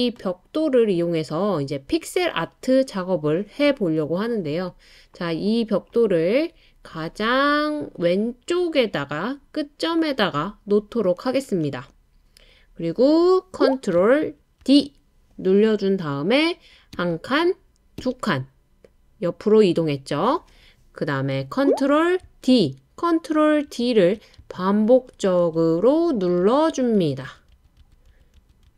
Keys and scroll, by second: 14.6 super+d, 16.9 Right, 18.0 Right, 22.5 super+d, 23.7 super+d, 24.7 super+d, 25.1 super+d, 25.4 super+d, 26.6 super+d, 27.4 super+d.